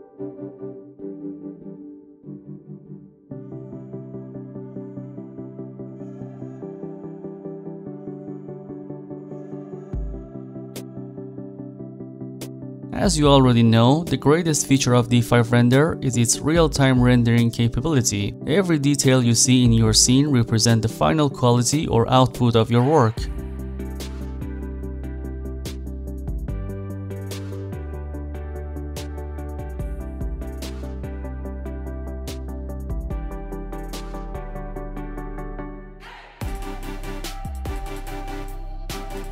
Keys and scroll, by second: 12.1 w, 12.4 a, 13.4 w, 18.3 a, 19.0 s, 19.5 a, 20.9 a, 23.2 a, 24.4 d, 31.5 a, 35.8 a.